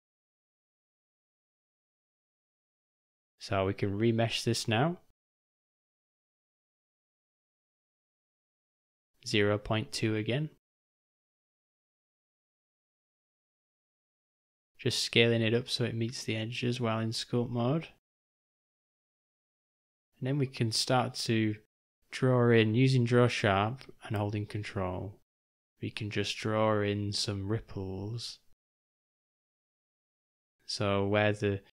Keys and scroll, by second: 2.0 v, 6.3 d, 8.4 o, 8.6 u, 10.4 d, 12.1 s, 14.5 u, 16.2 [, 16.3 [, 18.2-19.4 typing, 24.4 [, 24.5 [, 24.8 [.